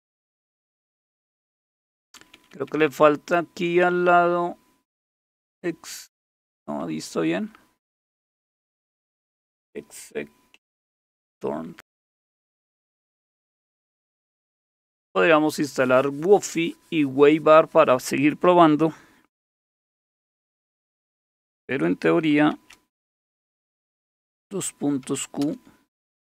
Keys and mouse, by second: 0.0-0.4 typing, 2.0-3.3 typing, 6.5 typing, 11.7 h, 21.9 Escape, 22.1 Escape, 22.5 shift+;, 24.8-26.2 typing.